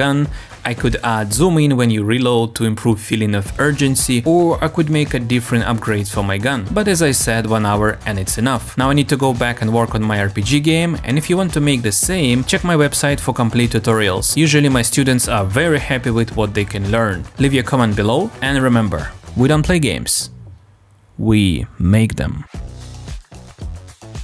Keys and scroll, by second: 1.1 m.